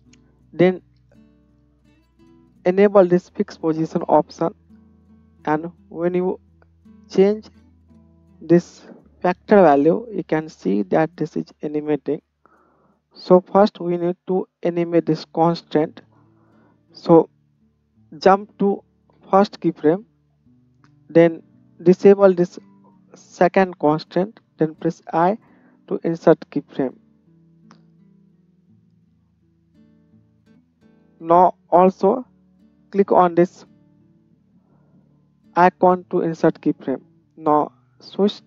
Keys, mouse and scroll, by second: 3.6-4.8 middle drag, 4.8-13.1 drag, 13.1-17.9 middle drag, 17.9-22.5 drag, 22.5-27.8 middle drag, 27.8-35.8 drag, 35.8-38.0 middle drag, 38.0-38.4 drag.